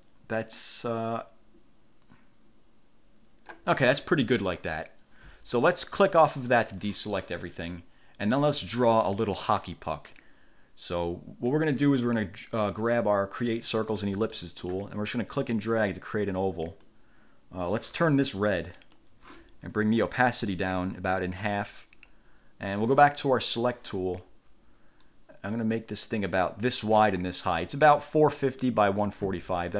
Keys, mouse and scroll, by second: 6.6 click, 13.8 click, 14.5 middle click, 15.5-17.2 drag, 18.9 click, 20.5-21.8 drag, 23.6 click, 25.2-26.8 drag.